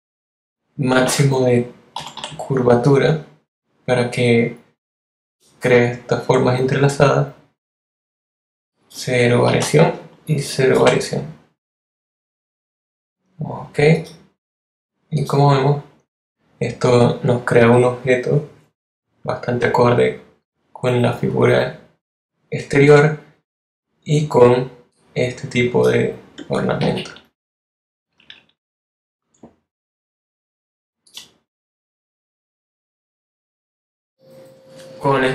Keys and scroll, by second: 0.9 l, 1.9 0, 9.4 0, 10.7 0, 26.9 shift+Left.